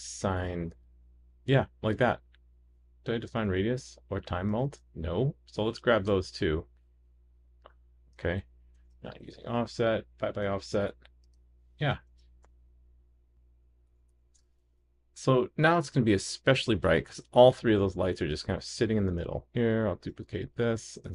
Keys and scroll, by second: 8.8 super+c, 12.1 super+v, 14.6 super+s, 19.9 shift+super+d.